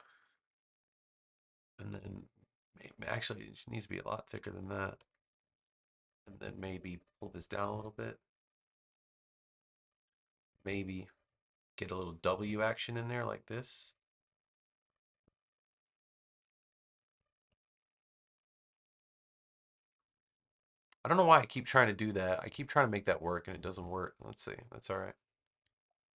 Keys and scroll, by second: 4.2 9, 4.9 Return, 25.4 a.